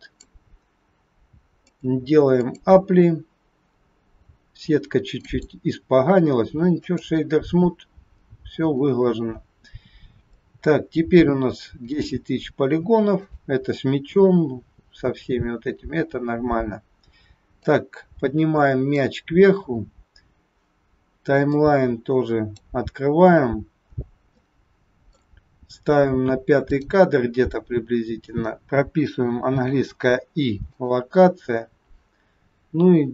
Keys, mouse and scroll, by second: 1.6 click, 3.7 scroll up 4, 4.2-4.8 scroll up 4, 5.2 right click, 8.0-9.6 scroll down 10, 10.4 shift+middle click, 10.4 scroll down 3, 13.1 click, 15.9-16.2 scroll down 1, 17.6 click, 21.5 click, 23.9-24.3 scroll up 4, 24.3 middle click, 26.7 click, 31.6-32.0 scroll down 1.